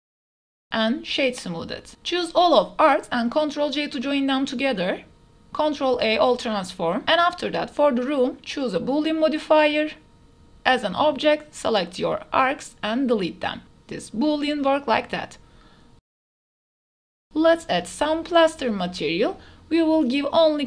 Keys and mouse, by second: 0.0-0.6 typing, 1.0 Tab, 1.8 ctrl+z, 2.4 shift+click, 3.4 ctrl+j, 5.7 ctrl+a, 6.4 ctrl+a, 7.0-8.0 drag, 11.0 click, 11.1 right click, 12.0 ctrl+a, 12.6 click, 13.1 x, 13.9 click, 14.6 click, 15.0 drag, 15.8 click, 16.0 KP_0, 16.4 a, 16.4 q, 17.1-19.4 drag, 20.1 click.